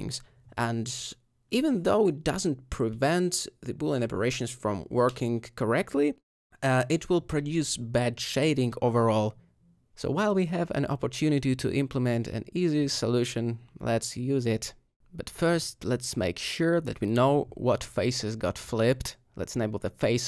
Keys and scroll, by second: 0.8 alt+g, 9.4 Tab, 11.9 alt+a.